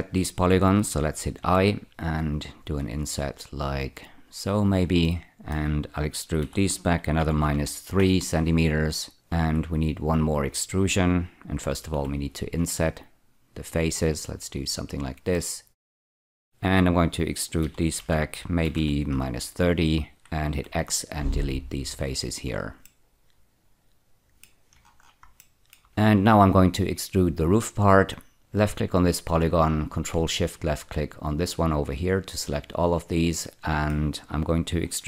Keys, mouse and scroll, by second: 1.4 i, 4.4 click, 5.0 middle click, 6.4-7.4 typing, 7.9 Return, 9.4 F4, 11.9 i, 14.7 click, 15.3 middle click, 17.6-18.7 typing, 19.1 Return, 20.5 x, 21.8 click, 22.2-22.8 scroll down 2, 22.8-24.4 middle drag, 25.3 shift+middle click, 28.5 click, 30.8 ctrl+shift+click, 33.3 middle click.